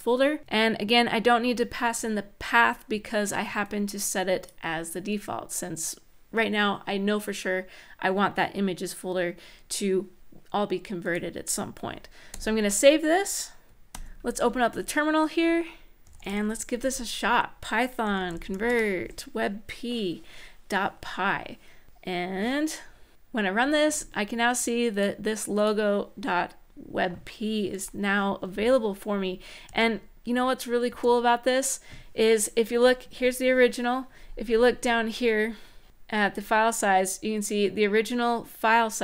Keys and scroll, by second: 12.1 super+s, 13.7 ctrl+`, 15.7-18.7 typing, 29.4 space, 32.8 Up.